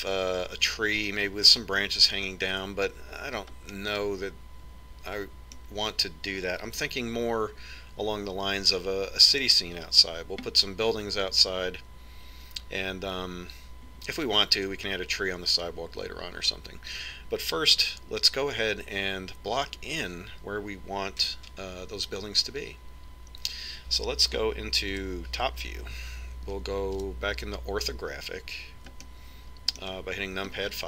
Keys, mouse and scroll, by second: 0.9-1.6 scroll down 1, 5.3-7.1 middle drag, 26.6 KP_7, 27.2 middle click, 28.7 KP_5, 30.7-30.8 middle drag.